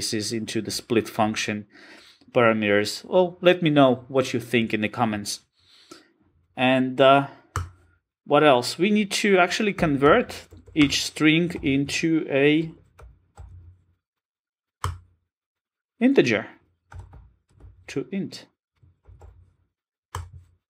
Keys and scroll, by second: 14.8 Return.